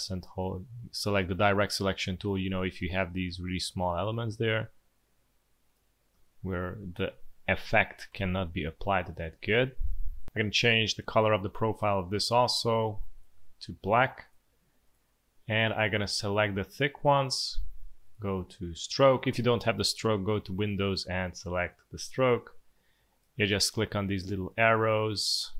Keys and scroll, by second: 6.9 Delete, 7.1 Delete, 8.0 v, 8.7 space, 9.8 space, 16.5 space.